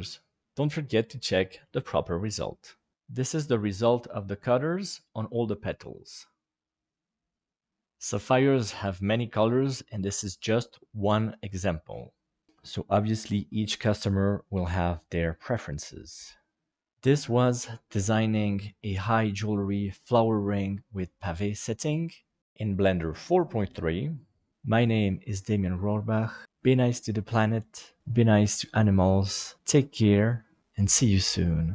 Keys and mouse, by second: 2.9-7.7 middle drag, 10.9-15.5 middle drag, 16.7-30.8 middle drag, 31.2 middle click.